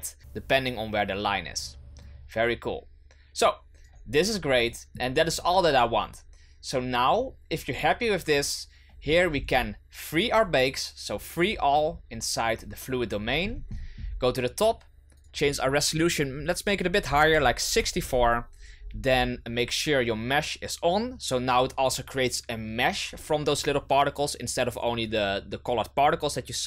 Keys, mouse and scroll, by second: 2.0-4.3 drag, 4.3-4.6 scroll down 2, 4.6-7.0 middle drag, 7.0 right click, 9.0-10.6 scroll down 18, 10.6-11.4 scroll down 1, 11.4-13.2 drag, 13.2-15.2 scroll up 19, 15.2-18.3 drag, 18.7-21.3 scroll down 13.